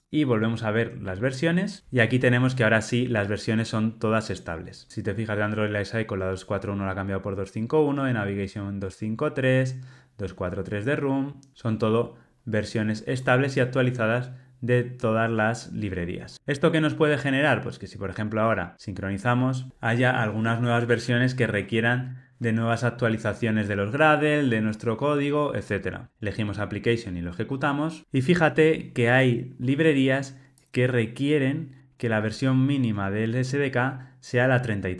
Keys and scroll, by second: 27.1 ctrl+r.